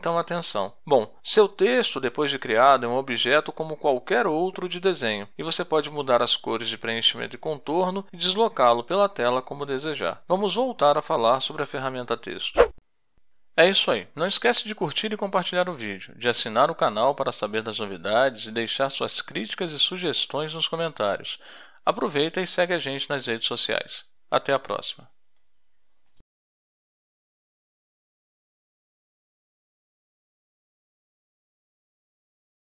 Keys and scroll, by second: 0.5 space.